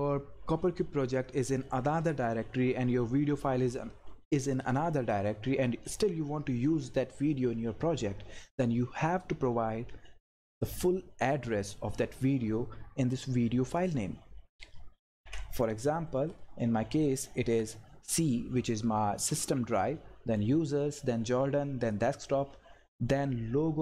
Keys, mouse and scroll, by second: 10.2 click, 13.8 click, 15.1 ctrl+v, 15.6 click, 16.1 Left, 21.8 click, 22.8 Right.